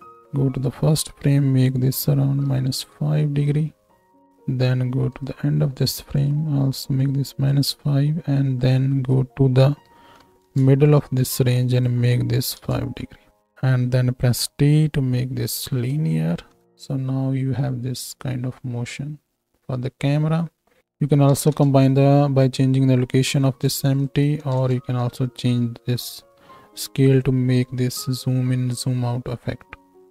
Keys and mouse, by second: 4.3 middle click, 5.1-7.1 drag, 7.1 middle click, 7.4 click, 7.6 middle click, 8.5-13.3 drag, 13.3-20.8 middle drag, 14.3 t, 16.5 shift+Right, 16.6 shift+Left, 16.6 space, 20.8-26.3 drag, 26.3-30.1 shift+middle drag.